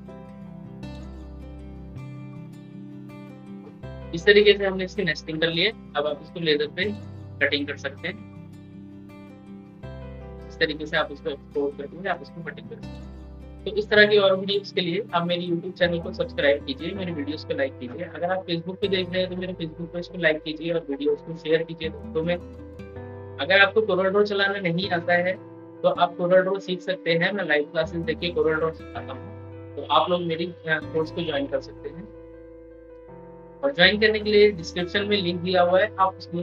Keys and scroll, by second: 12.9 ctrl+e.